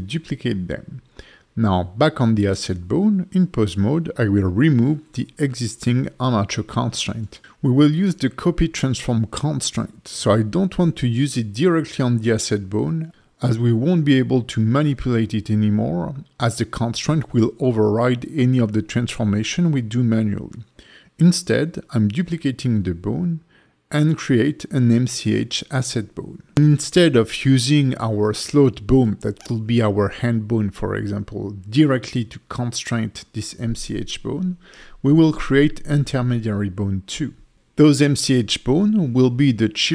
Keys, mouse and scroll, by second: 0.3 click, 0.7 Tab, 1.7 Tab, 2.4 click, 3.5 click, 6.2 click, 6.5 alt+middle click, 6.9 Tab, 12.8 shift+d, 13.1 s, 16.7 click, 17.0 F2, 20.3 s, 21.9 alt+middle click, 22.7 Tab, 23.6 click, 24.2 click, 25.1 shift+click, 25.5 middle click, 25.8 Tab, 26.2 middle click, 34.1 shift+d, 34.4 s, 36.0 click, 36.7 ctrl+F2.